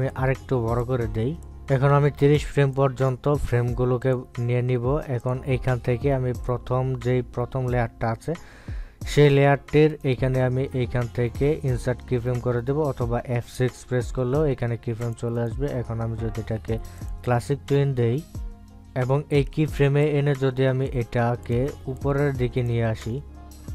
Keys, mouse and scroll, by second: 0.6 shift+click, 3.5 click, 4.3 right click, 5.3 click, 11.2 right click, 13.0 click, 16.3 click, 16.7 right click, 18.3-23.4 drag, 23.4 ctrl+z, 23.5 click.